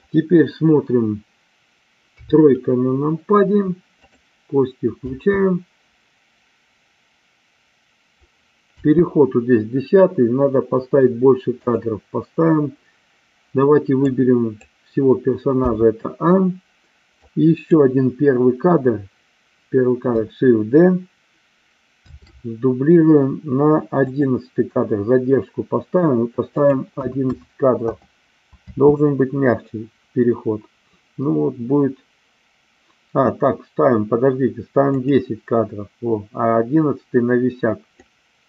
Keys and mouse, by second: 2.1 KP_3, 4.0 click, 5.1 space, 8.7 space, 11.7-14.6 drag, 15.6 a, 17.1 click, 22.1 shift+d, 24.1 click, 26.6-27.9 drag, 27.2 KP_1, 28.6 space, 34.9 click, 38.0-38.4 drag.